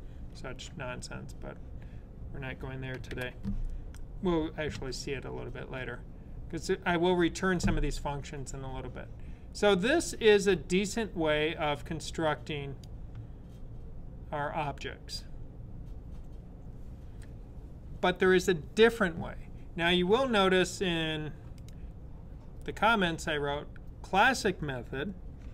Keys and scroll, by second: 2.9 super+/.